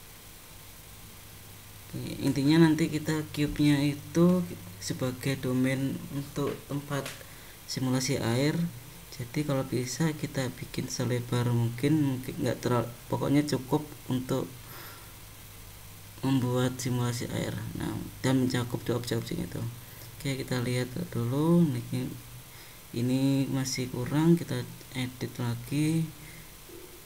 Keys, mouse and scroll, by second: 2.3 click, 3.0 click, 5.1 g, 11.6 click, 13.5 g, 19.4 `, 21.1 click, 22.9 g, 23.9 click, 26.2 x.